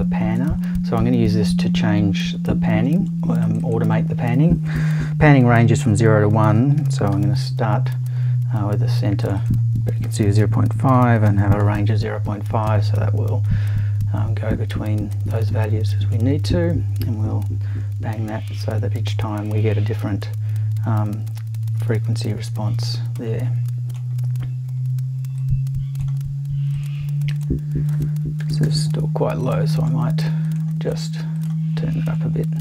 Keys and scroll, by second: 6.2-7.6 typing, 10.7-12.1 typing, 28.4 BackSpace, 28.6 7.